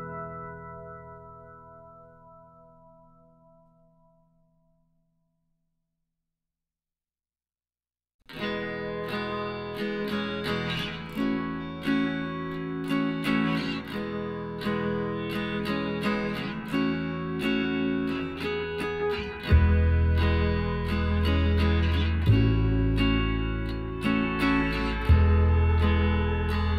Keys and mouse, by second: 1.9-3.7 drag, 2.9 z, 3.2-4.9 right drag, 3.9 z, 7.4-8.9 drag, 9.9 z, 10.3-12.9 right drag, 12.1 x, 13.9 z, 15.1 e, 20.3 middle click, 20.7-22.0 drag, 24.3 right click, 24.7-26.6 middle drag, 25.4 z, 26.6-26.7 right drag.